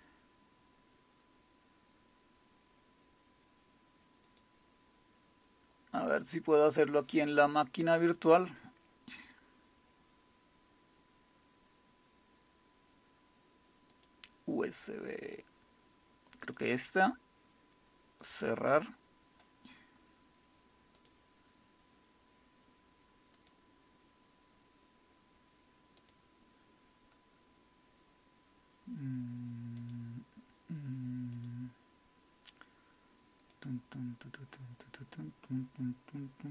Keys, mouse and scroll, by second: 4.3 click, 6.2 click, 13.9 click, 16.4 click, 18.2 click, 21.0 click, 23.4 click, 26.0 click, 29.8 click, 31.3 click, 33.4 click.